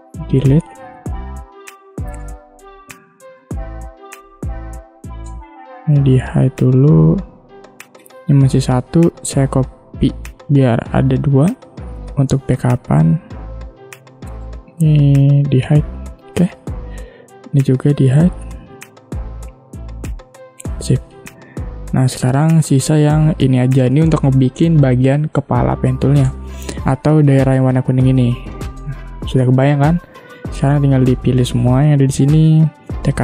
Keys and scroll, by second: 0.2 Delete, 5.5 space, 8.1 ctrl+z, 8.8 ctrl+c, 9.2 ctrl+f, 14.4 ctrl+z, 26.3 space, 29.0 space.